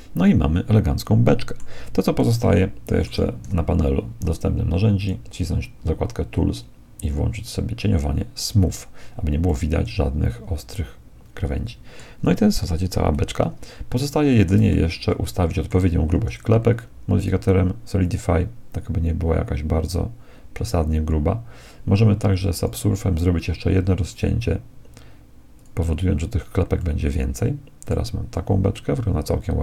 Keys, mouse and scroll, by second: 2.2-4.0 middle drag, 3.4 t, 5.0-6.7 drag, 8.4-9.4 drag, 9.4-11.4 middle drag, 13.4-16.4 middle drag, 17.2-19.8 drag, 22.6-27.4 drag, 26.8-29.6 middle drag.